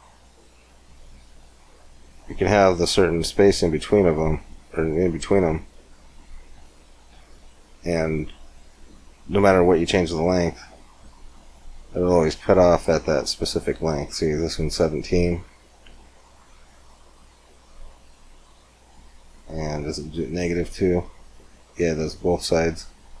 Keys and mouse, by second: 1.1-5.8 drag, 5.8-9.3 middle drag, 10.1-12.0 drag, 12.0-15.4 middle drag, 15.6-17.8 drag, 17.8-19.0 middle drag, 19.2-20.6 middle drag, 20.6-23.2 drag.